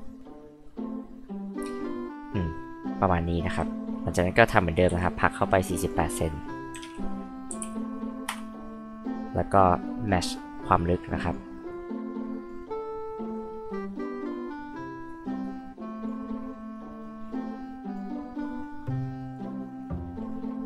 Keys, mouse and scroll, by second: 4.8 scroll up 2, 5.2 click, 6.7-8.1 typing, 8.3 Return, 9.8-11.3 drag, 11.7 click, 13.3 click, 14.4 click, 15.4 click, 16.7-17.9 drag, 18.4 click.